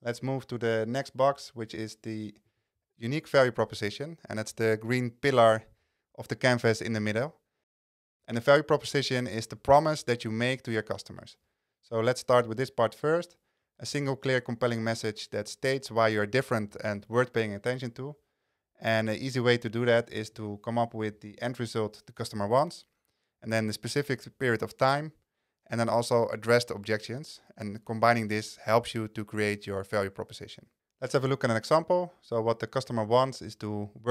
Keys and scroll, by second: 2.8 super+a, 8.4 super+a.